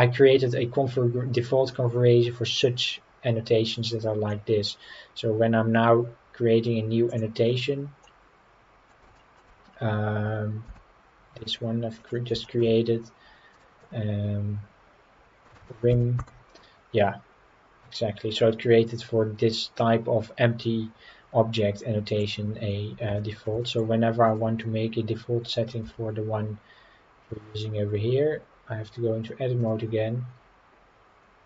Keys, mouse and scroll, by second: 4.3 middle click, 7.1 click, 8.0-8.9 middle drag, 9.1 shift+middle drag, 9.5 scroll up 3, 10.7 g, 12.0 click, 12.4 shift+middle click, 13.5-16.2 drag, 21.6-22.2 middle drag, 23.2 shift+middle drag, 23.6 shift+middle click, 24.2 click, 25.4 scroll up 2, 29.6 click.